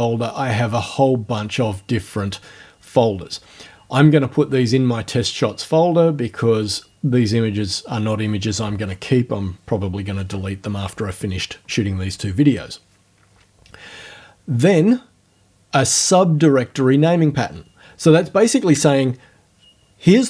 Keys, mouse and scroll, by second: 6.7 click.